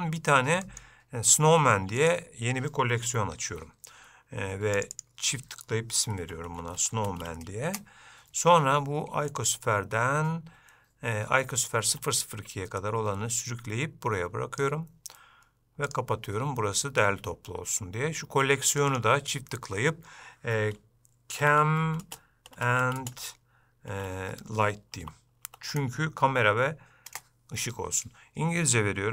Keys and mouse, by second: 0.8-2.3 right drag, 4.9-8.4 drag, 13.0-14.8 drag, 19.1-28.2 drag.